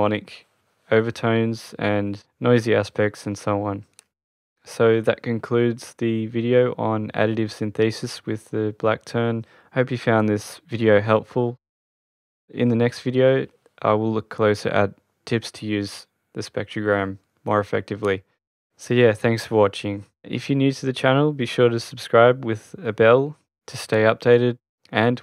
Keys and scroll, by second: 19.1 Return.